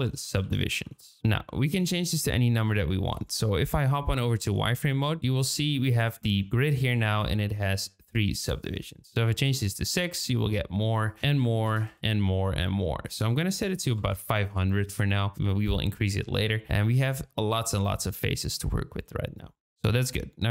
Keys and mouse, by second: 3.8 z, 5.8 middle click, 6.7 middle drag, 8.3-9.9 drag, 11.0-12.1 drag, 13.0-14.7 drag, 13.9 KP_0, 16.3-16.6 middle drag.